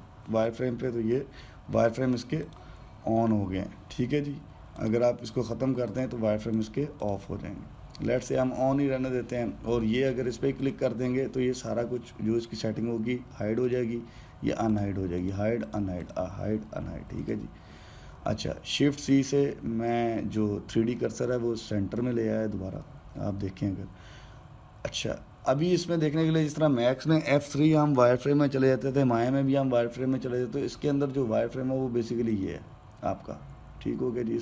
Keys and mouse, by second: 3.1-6.2 drag, 11.3 click, 14.4 click, 15.4 click, 15.9 click, 16.3 click, 16.7 click, 18.0 shift+c, 21.7-26.7 ctrl+middle drag, 26.8-29.8 middle drag, 33.1 click.